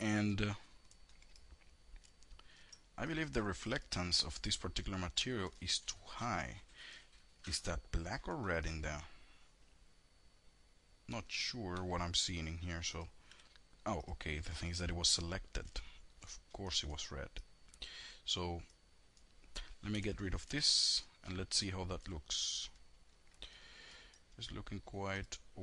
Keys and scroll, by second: 12.6 F4, 19.0 F4, 19.6 F4.